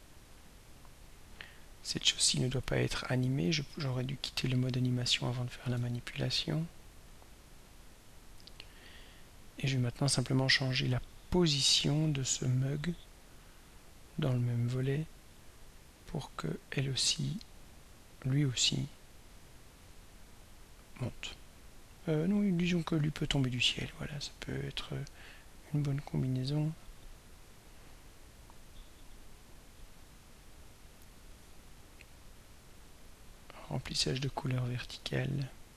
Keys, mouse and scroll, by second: 2.7 right click, 3.8 click, 5.9 ctrl+s, 7.2 click, 7.9 click, 17.7 click, 20.4 scroll down 1, 20.8-21.2 scroll up 1, 23.3-23.7 scroll up 1, 24.2-24.6 scroll down 1, 32.0-32.4 scroll up 1, 32.8 scroll down 1, 33.4 scroll down 2, 34.5 scroll up 2, 35.5 scroll down 2.